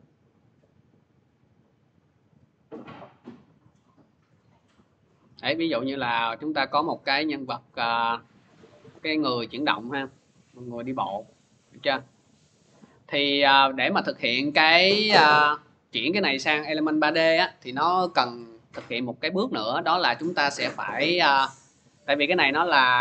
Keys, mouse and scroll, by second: 6.1 click, 6.3 middle click, 6.4 middle click, 6.4 middle click, 7.3 middle click, 7.7 middle click, 8.9 alt+middle click, 9.0 alt+middle click, 9.0 middle click, 9.1 middle click, 9.4 middle click, 9.4 middle click, 10.1 alt+middle click, 10.7 scroll, 14.5 middle click, 16.1-19.7 drag, 21.9 click.